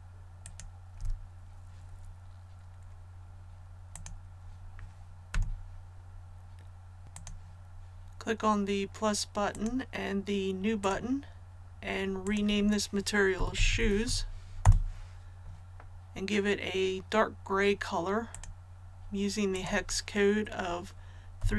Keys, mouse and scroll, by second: 3.9 click, 5.2 a, 7.0 scroll down 1, 7.1 click, 13.3-14.0 typing, 14.5 Return, 18.2 click, 21.3-21.5 typing.